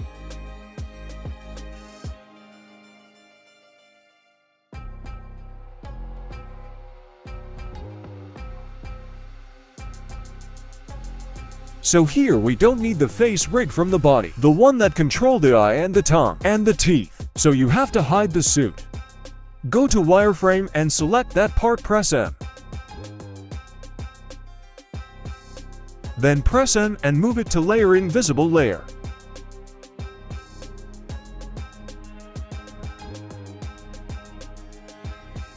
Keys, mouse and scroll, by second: 0.0 scroll down 1, 0.2 middle click, 0.6 g, 2.4 right click, 2.7 middle drag, 3.2 g, 3.9-4.8 scroll up 3, 4.3 shift+middle drag, 4.8-5.5 middle drag, 5.9 right click, 6.1 middle click, 6.7 r, 8.7 \, 9.1 shift+middle drag, 9.5 middle click, 10.3 middle drag, 11.7 click, 12.4 shift+middle drag, 13.6 KP_3, 14.2-14.6 scroll up 1, 15.1 right click, 16.1 b, 19.1 g, 22.3 middle click, 23.9 click, 24.2 middle click, 25.6 m, 28.4-28.7 middle drag, 29.5 right click, 30.7 click, 32.3 click, 33.2 drag, 33.5-34.8 scroll down 1, 34.8 click, 34.8-35.1 scroll down 1, 35.3 shift+middle drag.